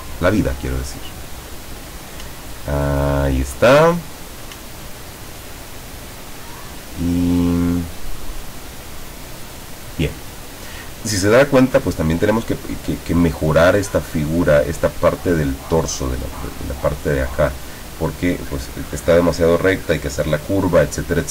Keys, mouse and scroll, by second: 0.6-2.1 drag, 2.9-3.2 ctrl+scroll down 1, 3.8 ctrl+middle click, 4.7-5.2 ctrl+scroll down 1.